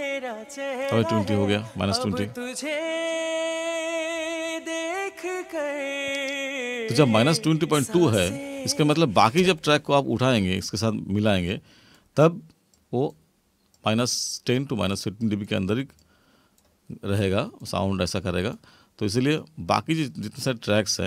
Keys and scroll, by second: 9.5 space.